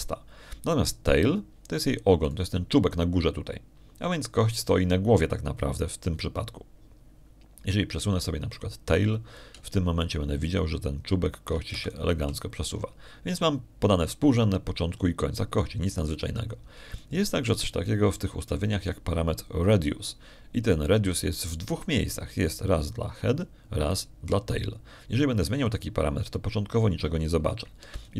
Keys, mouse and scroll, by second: 4.1 right click, 11.2-14.0 shift+drag, 13.6 shift+Escape, 17.6 middle click, 18.0 middle click, 18.8 shift+click, 27.5-28.1 drag.